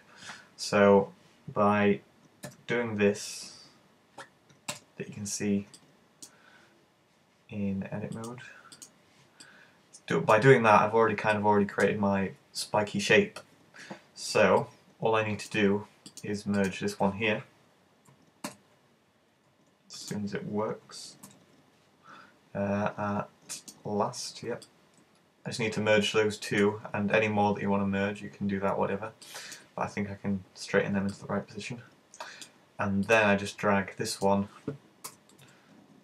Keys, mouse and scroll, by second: 2.5 `, 4.8 alt+h, 5.8 right click, 8.2 click, 9.5 middle click, 11.4 middle click, 14.6 middle click, 16.2 right click, 16.4 shift+right click, 16.6 shift+right click, 21.3 alt+m, 24.7 middle click, 29.3 middle click, 31.2 middle click, 33.1 right click, 33.5 middle click, 35.2 g.